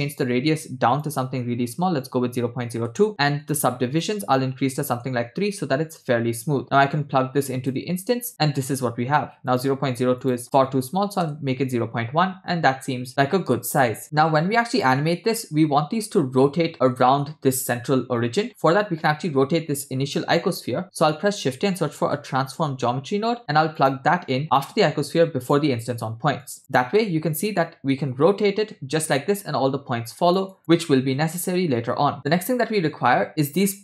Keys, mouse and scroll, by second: 0.1 click, 1.0-2.8 drag, 3.4 click, 4.0-5.0 drag, 6.8-7.8 drag, 9.5-11.3 drag, 10.8 BackSpace, 13.1-13.8 middle drag, 18.5-19.0 scroll down 2, 19.1-20.2 drag, 20.4 middle click, 20.8 shift+a, 26.4 click, 27.6-30.4 drag, 30.5 click, 32.1 click, 33.0 scroll up 2.